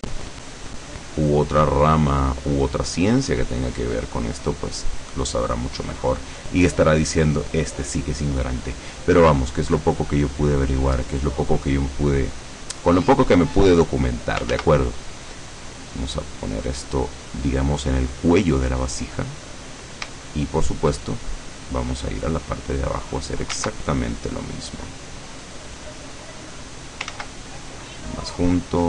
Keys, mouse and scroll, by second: 0.5 click, 1.2 click, 2.0 click, 2.9 click, 3.6 click, 4.3 click, 4.9 click, 5.7 click, 10.8 click, 12.1 click, 13.6 click, 14.6 ctrl+z, 15.3 click, 16.7 click, 17.8 click, 20.3 shift+click, 23.0 click, 23.6 ctrl+z, 24.2-25.3 ctrl+drag, 25.7-26.7 drag, 27.3 ctrl+z, 27.9-28.8 ctrl+drag.